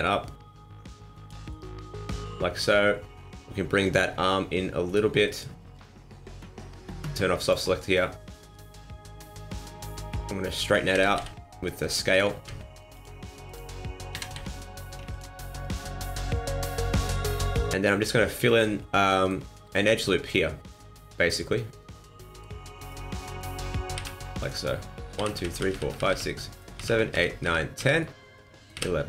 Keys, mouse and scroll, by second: 1.5 middle click, 3.8 click, 4.8 alt+right click, 5.2 middle click, 7.4 click, 8.4 click, 10.9 s, 12.3 ctrl+z, 12.9 click, 14.1 s, 15.6 click, 16.8 alt+right click, 17.6 click, 18.2 middle click, 18.9 middle click, 19.9 alt+right click, 20.7 middle click, 22.8 right click, 23.4 shift+right click, 23.9 f, 24.4 right click, 25.1-28.7 typing, 26.2 middle click, 28.0 middle click.